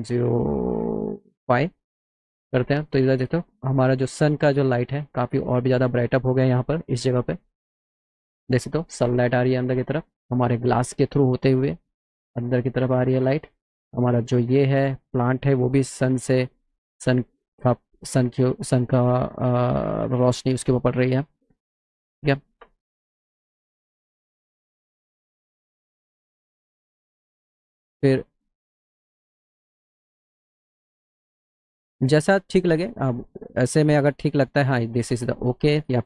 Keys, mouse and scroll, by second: 19.2 middle click, 19.8 middle click, 20.2 middle click, 20.5 middle click, 20.8 middle click, 24.5 click, 25.3 click, 26.4 click, 28.1-30.1 drag, 30.4 middle click, 31.7 middle click, 34.8 click.